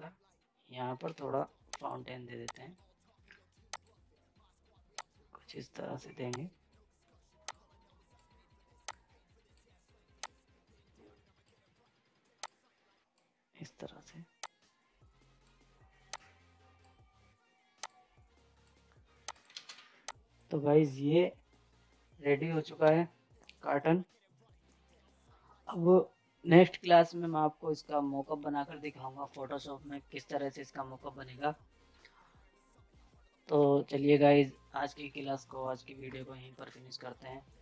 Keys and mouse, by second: 1.0 g, 1.7-19.3 drag, 5.1 typing, 19.5 ctrl+space, 19.7 z, 20.0 click, 22.5 typing.